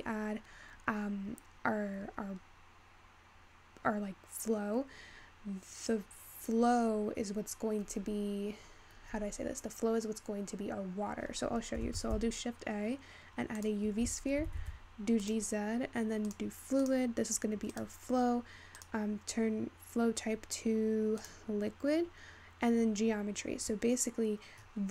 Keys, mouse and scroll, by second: 12.0 shift+a, 14.4 g, 16.3-18.2 drag, 18.2-18.8 scroll down 6, 18.8-21.8 drag, 21.8-23.0 scroll down 7.